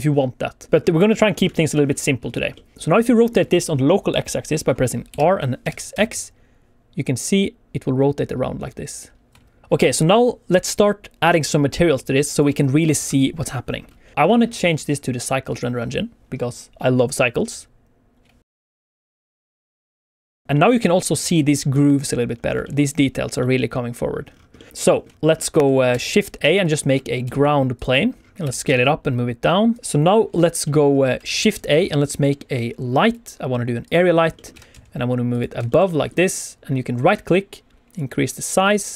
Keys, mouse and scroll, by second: 0.4 middle click, 0.8 scroll down 1, 1.0 middle click, 1.9 scroll down 1, 2.5 scroll down 2, 2.7 Escape, 2.7 middle click, 2.7 r, 2.7 x, 4.6 middle click, 5.1 r, 5.6 x, 5.9 x, 9.6 ctrl+click, 9.6 middle click, 9.6 scroll down 1, 9.8 KP_1, 10.4 middle click, 13.3 ctrl+z, 13.5 scroll up 1, 13.7 alt+a, 13.9 shift+middle click, 14.1 middle click, 17.7 alt+a, 17.7 click, 17.7 middle click, 17.7 scroll down 1, 20.4 scroll up 3, 20.5 middle click, 21.0 scroll up 2, 21.3 shift+middle click, 22.3 scroll down 1, 22.6 shift+middle click, 23.4 middle click, 24.2-24.5 scroll down 3, 24.5 middle click, 24.7 scroll up 1, 24.9 middle click, 25.0 scroll down 2, 25.1 middle click, 25.3 scroll up 1, 25.9 shift+a, 26.8-27.2 scroll down 2, 27.2 s, 27.7 click, 28.1 scroll up 2, 28.4 g, 28.6 z, 29.7 click, 29.8 click, 29.8 click, 30.6 middle click, 31.3 shift+a, 34.0-34.3 scroll down 2, 34.3 middle click, 34.5 g, 34.7 z, 35.3 click, 35.6 shift+middle click, 35.8 middle click, 36.2 scroll up 1, 36.6 scroll down 1, 36.9 right click, 38.7 click.